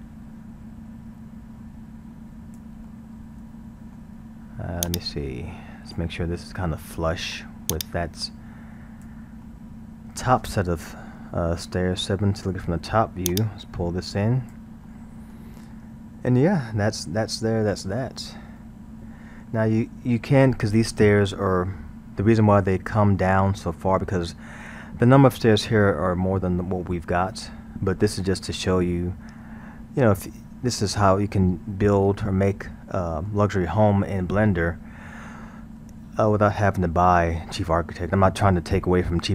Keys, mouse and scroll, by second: 2.9-4.9 middle drag, 4.9-6.9 drag, 6.9-7.7 middle drag, 7.7-9.4 drag, 9.4-12.0 middle drag, 12.0 KP_7, 13.3-14.9 drag, 14.9-21.6 middle drag, 23.5-26.5 middle drag, 27.3-32.3 middle drag, 32.9-37.4 middle drag.